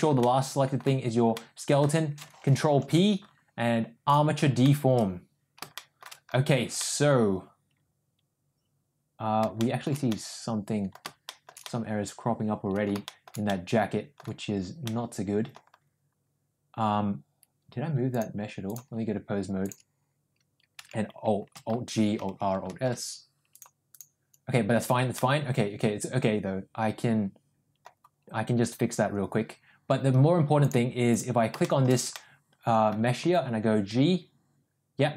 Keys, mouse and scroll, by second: 0.2-0.8 middle drag, 1.4 middle click, 2.8 ctrl+p, 5.8 shift+middle drag, 6.8-9.4 middle drag, 9.4 scroll down 1, 9.6 shift+middle drag, 10.2-10.9 middle drag, 10.9 scroll down 1, 11.3 shift+middle drag, 11.7-12.9 middle drag, 13.1 shift+middle drag, 13.5-14.2 middle drag, 14.2 scroll down 1, 14.9-15.6 middle drag, 15.6 scroll down 1, 18.3 click, 19.8 click, 21.0 a, 21.9 alt+g, 22.3 alt+r, 22.8 alt+s, 23.6 click, 25.2-27.9 middle drag, 30.6 click, 31.6 shift+middle click, 32.1 middle click, 33.3 g.